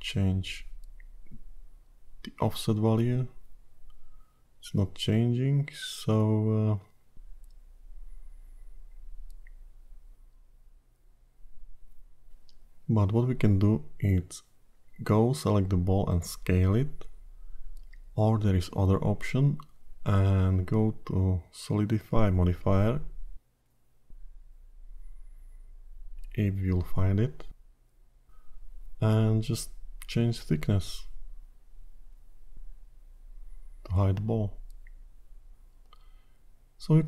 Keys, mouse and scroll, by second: 0.6 shift+click, 4.7 ctrl+z, 5.2 click, 13.2 ctrl+z, 14.5-15.5 scroll up 5, 15.5 click, 17.2 s, 23.2 click, 25.5 click, 31.0 click, 31.4-33.0 scroll down 9, 33.0 click.